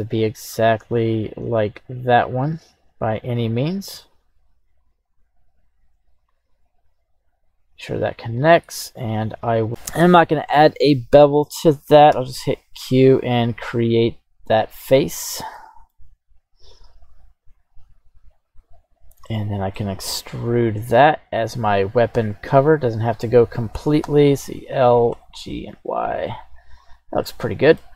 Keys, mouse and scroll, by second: 15.5 middle click, 16.1-16.9 scroll down 1, 17.5-19.0 drag, 19.0 scroll down 2, 19.2 middle click, 20.4 e, 22.6 click, 24.0 l, 25.1 g, 25.3 y, 26.8 click, 27.2 middle click.